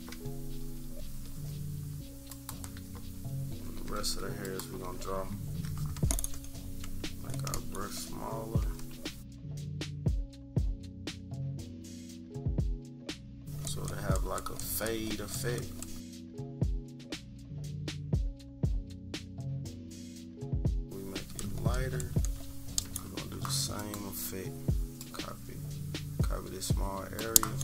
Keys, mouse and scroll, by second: 0.1 -, 0.3 -, 0.6 -, 0.7 scroll down 1, 0.8 -, 2.2 click, 2.9 -, 3.5 =, 3.7 =, 4.4 click, 4.8 =, 4.9-5.4 scroll up 4, 5.1 =, 6.8 click, 7.5 click, 8.7 click, 9.3 click, 10.2 click, 10.4 click, 10.7 click, 10.9 click, 11.2 click, 11.4 click, 11.7 click, 11.9 click, 12.0 click, 12.8 click, 13.0 click, 13.2 click, 13.7 click, 13.9 click, 14.2 click, 14.4 click, 14.6 click, 14.9 click, 15.1 click, 15.4 click, 15.6 click, 15.8 click, 16.0 click, 16.4 click, 17.6 click, 18.5 click, 18.9 click, 19.1 click, 19.3 click, 19.7 click, 20.3 click, 20.6 click, 21.2 click, 21.4 click, 21.7 click, 22.0 click, 22.3 click, 23.7 click.